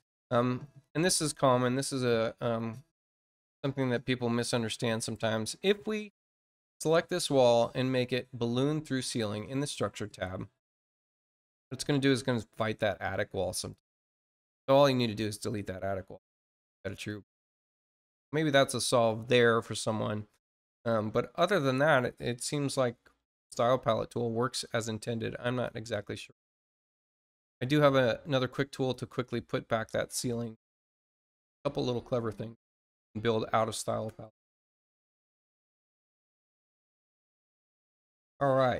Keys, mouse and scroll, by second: 1.7 click, 2.5 click, 5.1 click, 8.9 click, 10.6 click, 11.8 click, 13.4 click, 17.0 click, 25.4 click, 28.6 click.